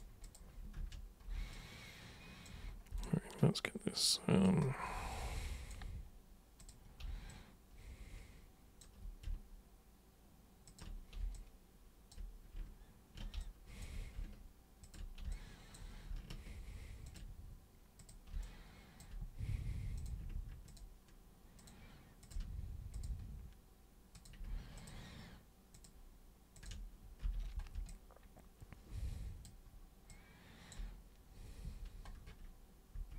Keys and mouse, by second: 0.2 super+click, 0.7 ctrl+super+1, 1.5 alt+super+click, 3.0-4.4 alt+super+drag, 5.1 alt+super+click, 6.6 super+click, 7.3-8.8 alt+super+drag, 10.7 ctrl+super+click, 11.3 alt+super+click, 13.4 alt+super+click, 14.8 ctrl+super+click, 15.3 alt+super+click, 17.0 ctrl+super+click, 17.9 super+click, 18.4 alt+super+click, 20.0 super+click, 20.6 ctrl+shift+super+click, 21.6 ctrl+shift+super+click, 22.2 ctrl+shift+super+click, 22.9 super+click, 24.1 super+click, 24.7 ctrl+shift+super+click, 25.7 ctrl+shift+super+drag, 26.5 ctrl+shift+super+click, 27.2 super+g, 27.8-29.4 alt+super+drag, 30.1 alt+super+click, 31.6 super+3, 32.9 super+1.